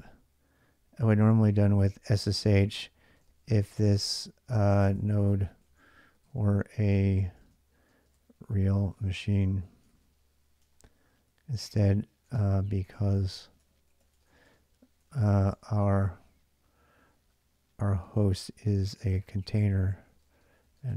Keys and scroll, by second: 0.8-15.6 typing, 16.8-20.9 typing.